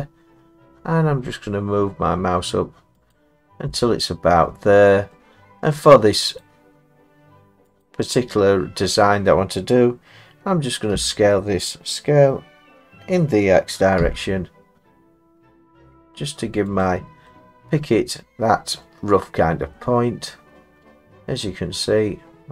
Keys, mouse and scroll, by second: 3.1 click, 5.1 middle click, 6.4 click, 10.9 s, 14.0 x, 16.8 click, 18.2 middle click, 18.7 middle click, 18.8 middle click, 19.7 middle click.